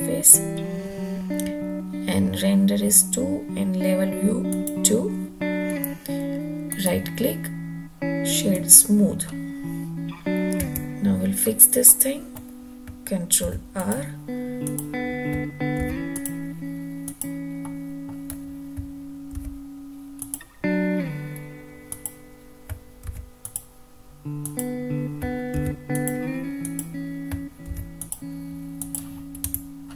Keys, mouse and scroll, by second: 4.3 click, 6.5-8.6 right drag, 10.5 Tab, 11.7 middle click, 13.2 ctrl+r, 14.4 click, 15.6 ctrl+r, 16.9 click, 17.4-17.9 middle drag, 19.1 ctrl+r, 21.7 click, 23.0 ctrl+r, 24.3 click, 25.4 ctrl+r, 26.4 click, 27.5 ctrl+r, 28.6 click, 29.3 Tab, 29.6-29.9 middle drag.